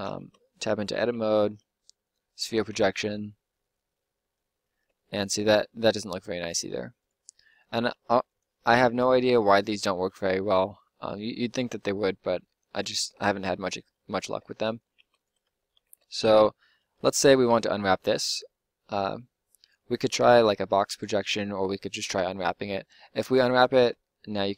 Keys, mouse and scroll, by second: 0.2 Tab, 1.0 u, 2.7 Tab, 4.6 Tab, 6.4 s, 7.2 g, 8.0 g, 8.9 click, 9.2 g, 9.8 click, 10.1 Tab, 12.0 Tab, 12.6 Tab, 14.2 Tab, 14.7-17.4 drag, 14.9 Tab, 15.8 Tab, 20.4 u, 23.8 Tab.